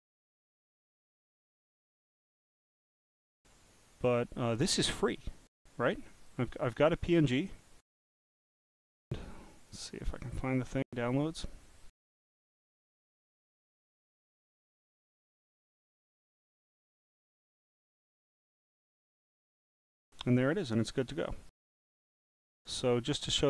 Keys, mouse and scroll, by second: 0.0-1.6 typing, 2.7 click, 6.2 click, 7.3 click, 8.5 right click, 9.7 click, 12.2 click, 13.2 click, 15.6 click, 15.7 click, 17.2 click, 17.4 click, 19.2 click, 22.3 click.